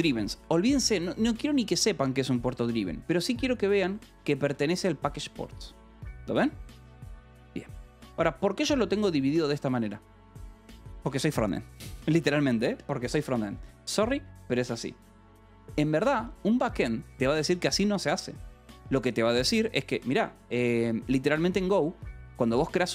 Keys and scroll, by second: 4.1 k, 5.2 shift+v, 7.6 Escape, 7.8-11.3 typing, 13.3 Return, 16.5 Escape, 19.7 k, 20.4 shift+;, 21.1 k, 21.9 Return.